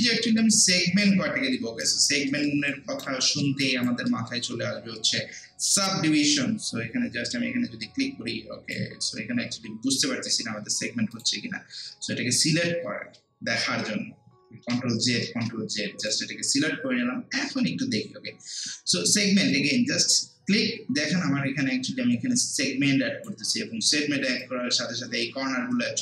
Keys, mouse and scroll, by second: 0.3 alt+middle click, 0.7 alt+right click, 2.3 alt+middle click, 2.7 alt+right click, 3.3 alt+middle click, 3.6 alt+right click, 4.1 alt+middle click, 5.8-11.1 drag, 14.3 click, 14.6 ctrl+z, 15.3 ctrl+z, 16.0 click, 19.5-23.7 drag, 23.7 scroll down 1, 24.3 scroll up 1, 24.4-26.0 alt+drag.